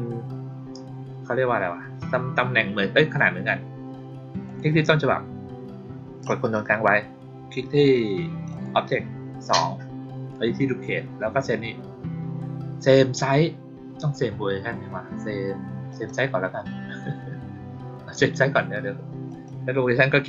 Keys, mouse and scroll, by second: 4.4 click, 8.4 ctrl+click, 15.8 click, 19.2 click.